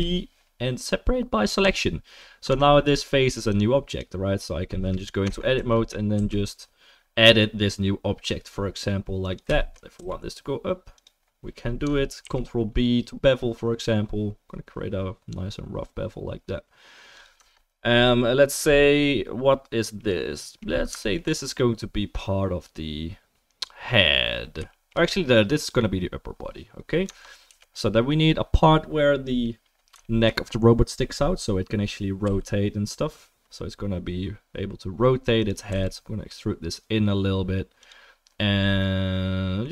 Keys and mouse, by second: 2.5 Tab, 3.9 click, 4.3-21.1 middle drag, 5.2 Tab, 5.5 a, 6.1 s, 9.9 e, 12.2 ctrl+b, 17.4 Tab, 24.7-26.5 shift+middle drag, 27.1 Tab, 27.5 3, 27.7 click, 32.2 i, 35.7 e.